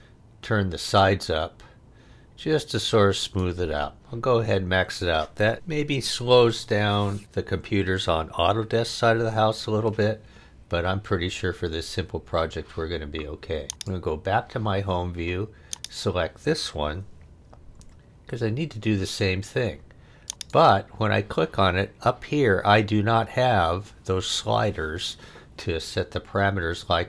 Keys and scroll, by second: 17.7 f.